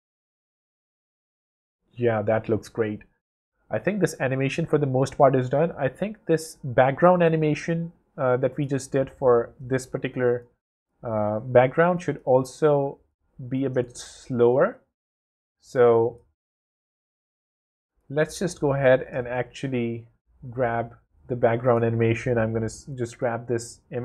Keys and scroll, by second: 4.6 w, 9.7 space, 17.1 super+space, 17.9 space, 19.1 space.